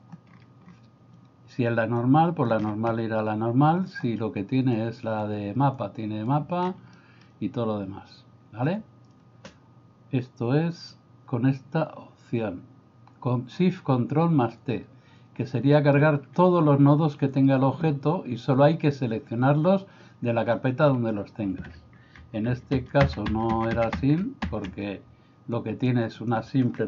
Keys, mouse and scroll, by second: 2.1 click, 2.9 middle click, 3.9 click, 5.2 click, 5.8 click, 7.0 middle click, 22.4 ctrl+z, 22.6 ctrl+z, 23.2 ctrl+z, 23.5 ctrl+z, 23.8 ctrl+z, 24.3 ctrl+z, 24.6 ctrl+z, 25.6 click, 26.1 click.